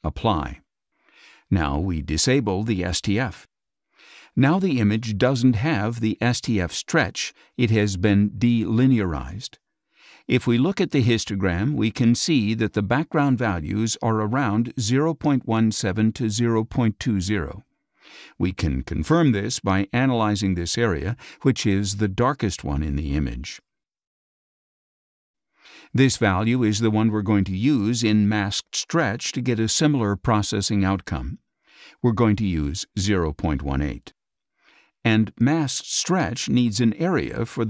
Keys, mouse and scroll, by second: 0.3 click, 10.8 click, 12.3 click, 18.8 click, 20.7-27.0 drag, 30.7-32.1 drag, 32.6 KP_0, 32.7 KP_Decimal, 33.7 KP_1, 33.9 KP_8, 35.4 click, 37.5 click.